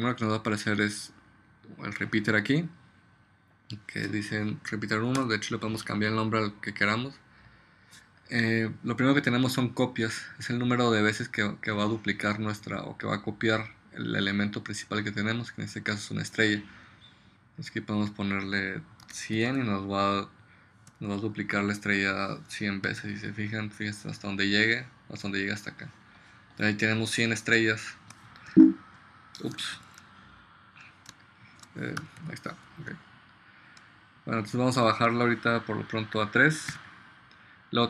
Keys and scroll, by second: 5.3 Return, 19.2 1, 19.5 0, 21.0 ,, 23.0 space, 28.6 2, 29.9 super+z, 31.2 space, 31.7 space, 32.9 space, 36.9 3.